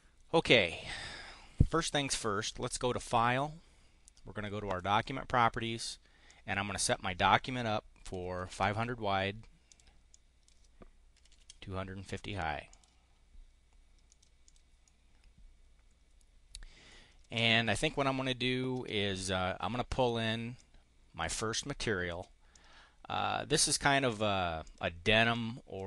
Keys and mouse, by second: 3.0 click, 4.6 click, 6.2 click, 8.1 5, 8.4 0, 9.6 click, 10.0 click, 10.8-11.7 typing, 12.6 click, 14.0 click, 14.6-16.4 drag, 17.3 click, 20.5 click, 22.4-23.7 drag, 24.0 click, 24.5 click, 25.1 click.